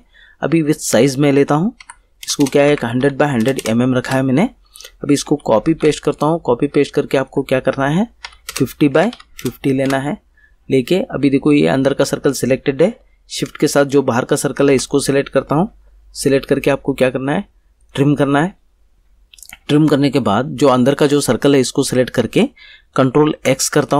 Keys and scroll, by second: 1.8 1, 2.2 0, 2.7 Tab, 3.0 1, 3.4 0, 4.0 Return, 5.2 ctrl+c, 5.6 ctrl+v, 8.2 5, 8.4 0, 8.9 Tab, 9.1 5, 9.4 0, 9.8 Return, 23.3 ctrl+x.